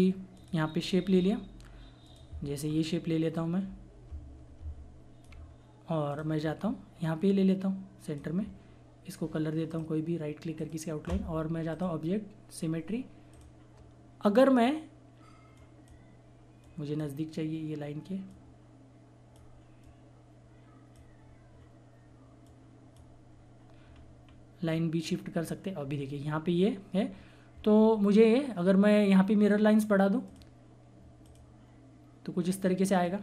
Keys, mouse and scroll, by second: 2.7 scroll up 1, 3.4 click, 6.1 click, 6.4-7.1 scroll down 1, 7.1 click, 10.5 right click, 11.7 click, 23.9-24.2 scroll up 1, 24.7 click, 25.4 scroll down 1, 30.2 click.